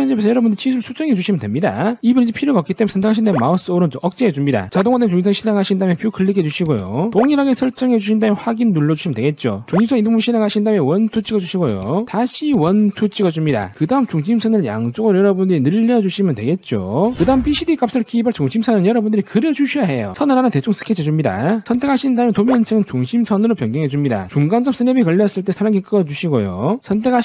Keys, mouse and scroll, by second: 0.0 click, 0.6 click, 0.9 click, 1.6 click, 2.0 click, 3.1 click, 3.5 right click, 4.5 click, 6.0 click, 6.3 middle click, 7.1 click, 7.5 click, 8.1 click, 8.5 click, 9.4 click, 10.6 click, 11.5 click, 12.1 click, 12.9 click, 14.3 click, 16.2 click, 20.3 click, 21.2 click, 21.9 click, 22.6 click, 23.3-24.1 scroll down 1, 24.1 click, 24.4 click, 26.1 click, 27.0 click.